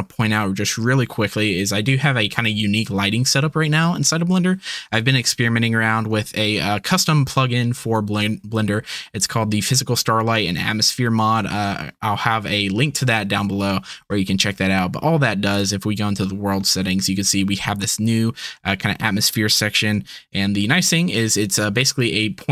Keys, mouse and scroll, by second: 9.2 click, 15.5 click, 20.2 KP_Decimal, 21.1 middle click, 21.7-22.5 middle drag.